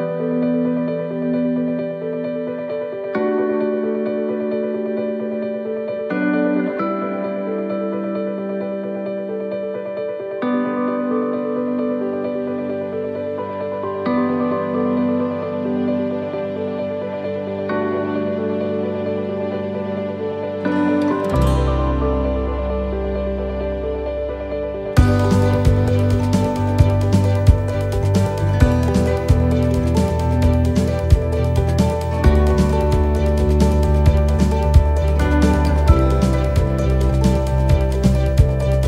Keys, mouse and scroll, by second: 0.6 click, 4.2 click, 6.6 click, 7.7 click, 11.1 scroll up 5, 11.6 shift+middle click, 15.5 click, 16.3 click, 23.0 BackSpace, 30.7 shift+d, 31.6 scroll down 1, 32.8 click, 32.8 scroll down 1, 34.9 click.